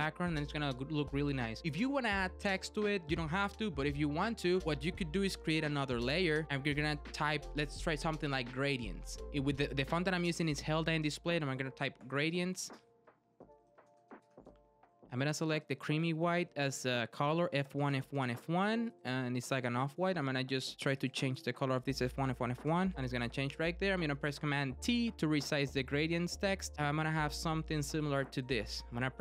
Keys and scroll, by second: 24.8 super+t.